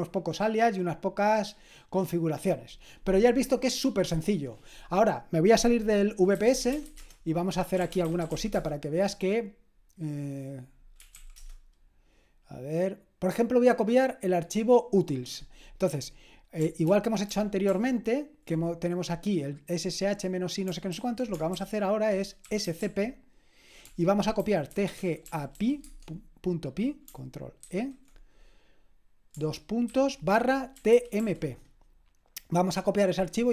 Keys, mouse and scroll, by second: 6.1-9.0 typing, 10.9-11.6 typing, 16.9 ctrl+p, 17.3 ctrl+p, 17.7 ctrl+p, 20.9 ctrl+a, 21.6 alt+d, 22.2-26.0 typing, 27.7 ctrl+e, 30.2-31.7 typing.